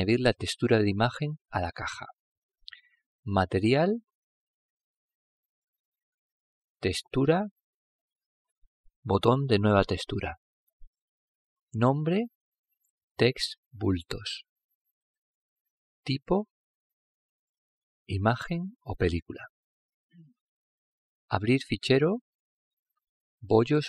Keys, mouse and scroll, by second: 0.0 click, 1.4-3.0 middle drag, 4.1-7.2 drag, 7.3 click, 8.5-12.2 drag, 12.3 click, 16.6 click, 19.1 click.